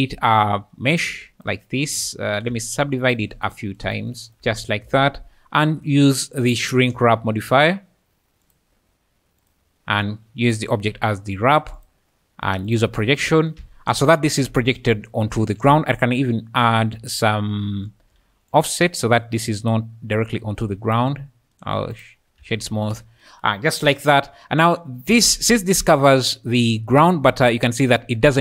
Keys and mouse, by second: 0.3 s, 1.2 shift+q, 1.3 s, 1.8 g, 2.3 click, 2.5 Tab, 2.8 click, 4.3 Tab, 5.8 drag, 6.4-8.6 drag, 9.4 click, 10.4 click, 11.7-12.8 drag, 14.1-14.4 `, 14.6 `, 16.1 shift+middle click, 18.7-21.0 shift+drag, 21.6 click, 24.4-25.6 `, 25.8-26.9 `, 27.3 q.